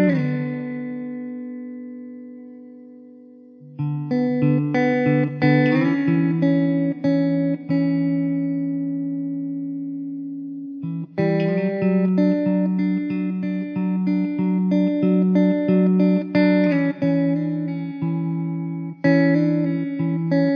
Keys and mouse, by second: 3.2 1, 15.3 alt+w, 15.9 alt+middle click, 18.9 alt+middle click.